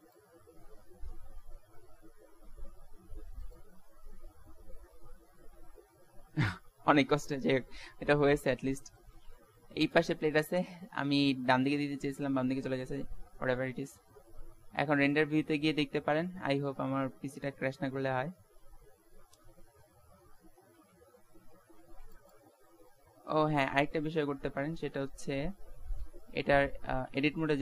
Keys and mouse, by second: 0.7-2.5 middle drag, 2.5 g, 7.7 middle click, 8.2 KP_0, 10.3 Tab, 11.0 Tab, 12.8 shift+z, 20.9 z, 21.2 z, 21.7 ctrl+s, 25.4 middle click, 25.5 middle click, 26.2 middle click, 26.8 Tab.